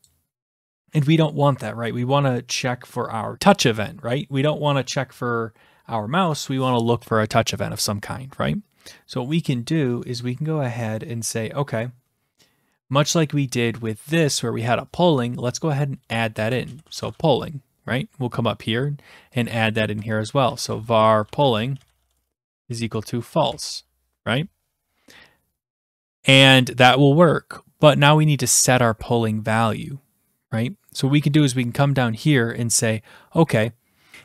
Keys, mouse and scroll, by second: 0.0 click, 16.1-17.6 typing, 18.0-18.8 scroll, 19.4 click, 19.9 Return, 20.3-24.0 typing, 24.8 scroll, 26.4-26.9 scroll, 27.0-27.7 scroll, 27.7 scroll, 30.7-31.2 scroll, 31.5-32.2 scroll down 11, 32.2-32.7 scroll down 1.